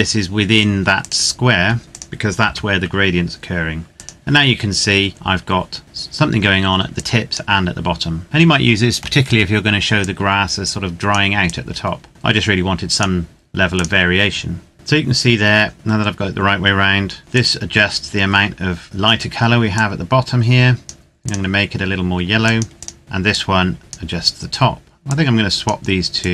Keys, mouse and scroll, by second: 0.9 click, 1.5 s, 1.9 click, 2.4 g, 3.9 click, 6.9 click, 9.8 click, 11.8 click, 14.7 click, 17.6 click, 20.0 click, 23.2 click, 25.4 click.